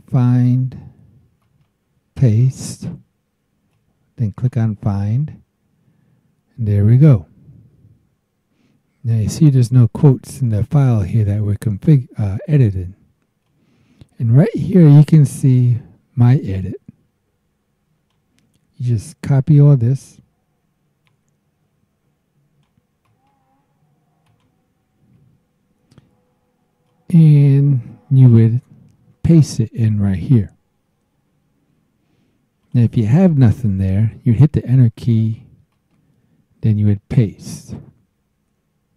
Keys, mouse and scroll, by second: 1.4 right click, 2.6 click, 3.7 click, 5.8-6.4 scroll down 1, 10.4 click, 13.4-18.3 drag, 21.1-22.8 drag, 23.0 right click, 24.2 click, 25.0 alt+Tab, 26.9-28.5 drag, 32.6 click, 34.2 KP_Enter, 35.7 right click.